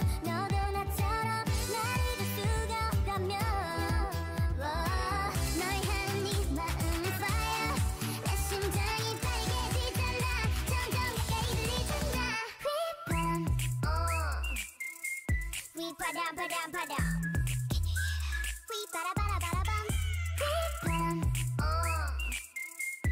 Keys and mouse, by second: 0.0 g, 1.1 r, 2.2-5.0 typing, 7.1 r, 7.8 g, 10.1 a, 10.6 l, 11.1 r, 11.8 g, 13.0 g, 13.8 g, 15.2 l, 15.9 g, 19.0 g, 20.0 a, 20.6 l, 21.0 click, 21.3 r, 22.6 g.